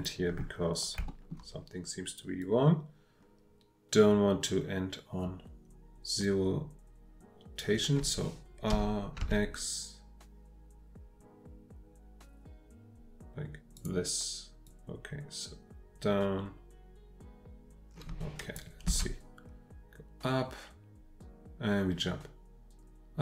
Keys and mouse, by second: 0.4 middle click, 1.1 shift+middle click, 2.4-7.6 drag, 8.7 r, 9.2 x, 13.9-14.7 middle drag, 18.9 space.